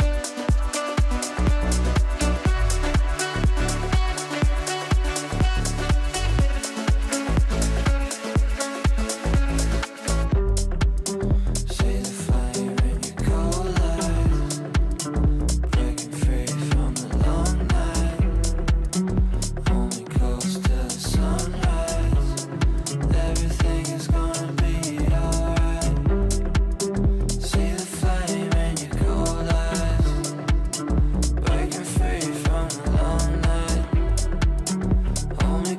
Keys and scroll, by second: 26.5 shift+F2, 27.1 F3, 30.9 F3, 34.2 shift+F2, 34.5 F3.